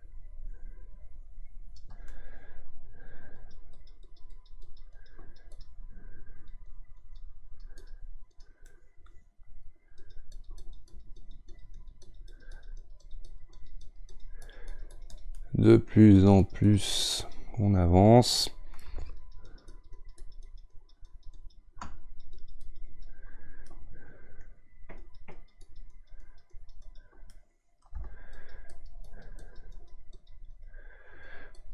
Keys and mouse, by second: 2.1-3.4 middle drag, 3.4-8.7 drag, 8.7-10.0 middle drag, 10.0-15.4 drag, 15.4-16.4 middle drag, 16.4-23.6 drag, 23.6-25.0 middle drag, 25.0-27.3 drag, 27.3-28.3 middle drag, 28.3-31.7 shift+drag.